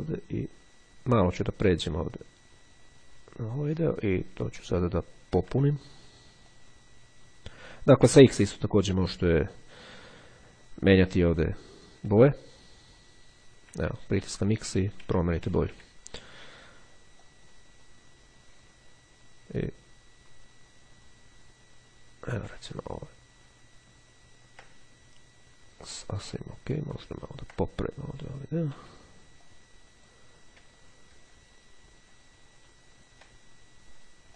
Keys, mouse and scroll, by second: 5.0-5.6 ctrl+scroll up 2, 5.6 ctrl+x, 5.6 ctrl+scroll up 1, 6.6-9.8 drag, 13.8 x, 14.6 x, 17.2-22.8 drag, 22.8-23.4 ctrl+scroll down 1, 24.3-24.8 ctrl+scroll down 1, 27.0-27.9 ctrl+scroll up 1, 28.7 x, 29.6-30.7 drag, 30.9-31.9 ctrl+scroll down 2, 32.8-33.6 scroll up 2.